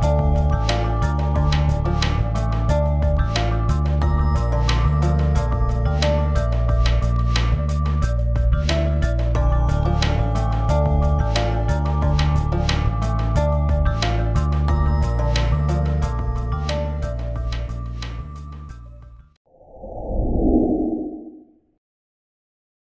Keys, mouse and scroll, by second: 3.2-3.6 drag, 11.3 click, 11.9 click, 12.5 ctrl+0, 13.4-14.0 ctrl+scroll down 1, 14.0 click, 17.6 0, 18.5 click.